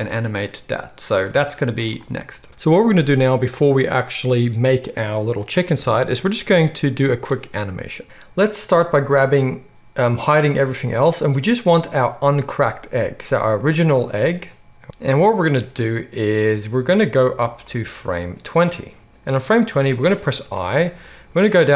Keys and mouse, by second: 2.5-10.5 drag, 5.7 KP_1, 10.5 middle click, 10.8 click, 10.9 middle click, 11.5 click, 11.6-12.3 middle drag, 12.3 click, 12.4-13.5 middle drag, 13.5 click, 13.7-17.7 middle drag, 17.7-21.7 drag.